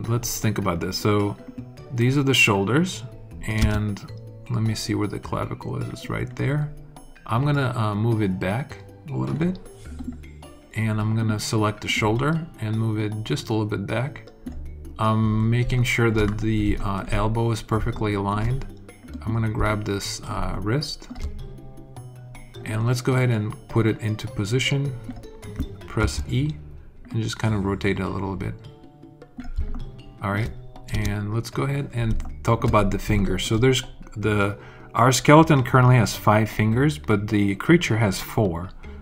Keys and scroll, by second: 3.5 space, 25.9 e, 30.8 alt+space, 31.4 space.